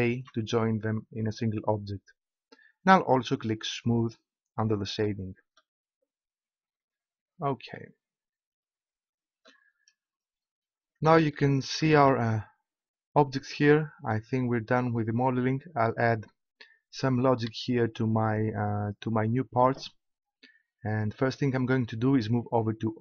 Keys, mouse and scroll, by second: 0.0 ctrl+j, 4.0-5.0 drag, 5.0 middle click, 7.0-8.7 middle drag, 9.2 middle click.